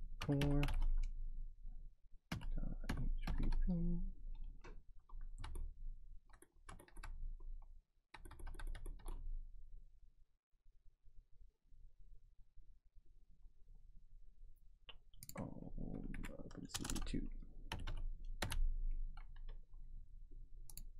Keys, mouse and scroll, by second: 0.0-1.2 typing, 2.3-3.4 typing, 5.4 alt+Tab, 6.3 alt+Tab, 6.9 alt+Tab, 9.9 scroll down 3, 15.3 click, 16.1 Right, 16.7-18.9 typing, 20.7 click.